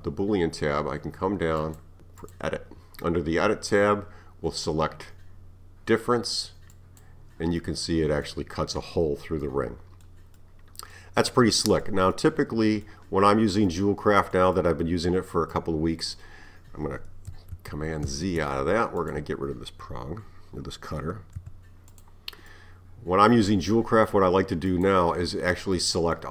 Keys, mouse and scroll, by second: 1.6 click, 2.2 click, 6.8 click, 7.6-13.2 middle drag, 13.2 scroll down 3, 13.7-17.3 middle drag, 17.6 z, 18.1 z, 19.0 click, 21.4 x, 22.5-24.7 middle drag, 24.7 click, 25.8-26.3 middle drag.